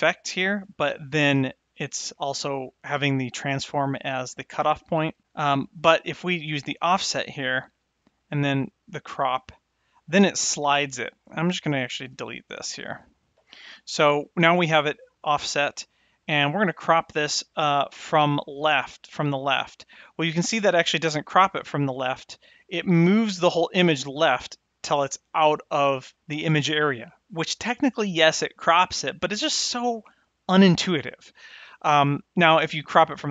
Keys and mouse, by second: 3.3 click, 5.2 click, 6.6 click, 8.3-10.4 drag, 12.1 x, 32.3-33.3 drag.